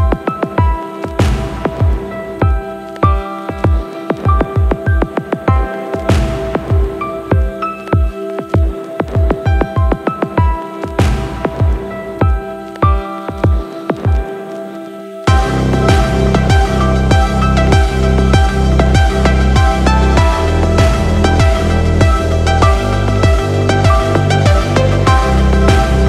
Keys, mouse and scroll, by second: 1.7-5.9 drag, 7.4-9.6 shift+middle drag, 11.2 drag, 12.3 click, 13.9 click, 18.3 click, 19.6 n, 23.7 i.